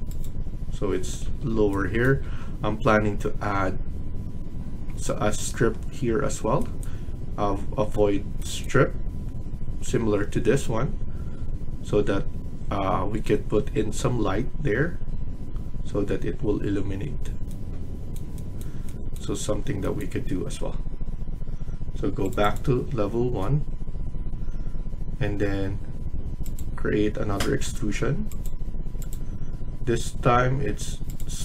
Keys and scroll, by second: 0.8 Escape, 1.1 Escape.